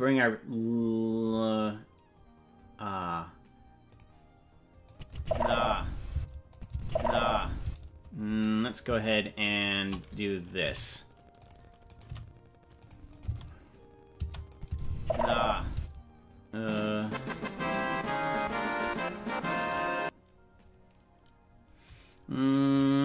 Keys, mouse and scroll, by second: 3.0 click, 3.9 click, 4.9 click, 5.1 space, 6.1 space, 6.5 click, 6.7 space, 7.6 space, 8.5-10.6 right drag, 10.6 g, 11.9 right click, 12.1 g, 13.1 click, 13.3 space, 14.2 space, 14.5 click, 14.6 space, 15.7 space, 17.8-18.4 scroll down 7.